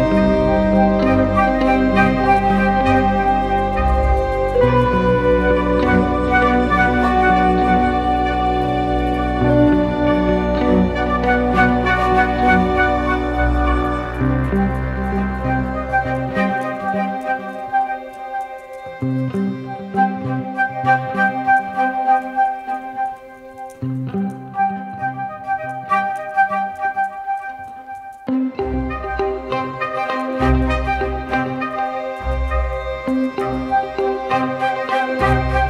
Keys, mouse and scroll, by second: 18.4 ctrl+t, 19.7 ctrl+t, 19.9 alt+shift+click, 25.8 Return, 32.1 double click.